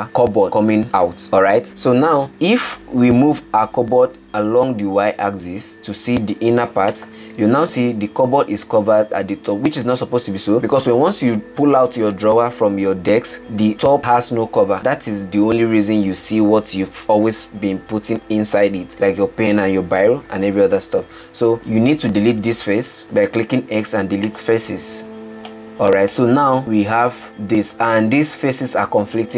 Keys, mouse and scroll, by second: 5.0 g, 9.0 click, 23.0 x, 27.2-29.3 middle drag.